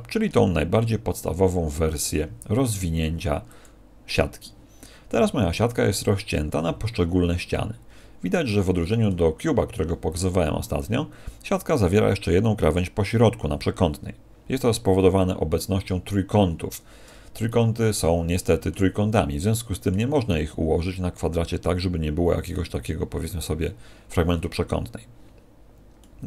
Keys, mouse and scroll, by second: 5.1 middle click, 17.4 middle click, 19.1 middle click, 26.0 middle click.